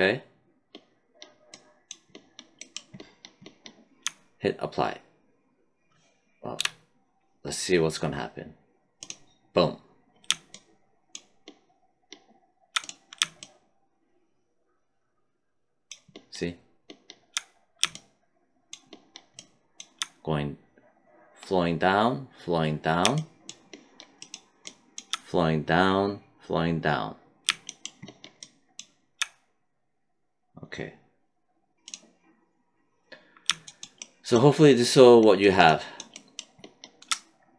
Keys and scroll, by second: 6.5 q.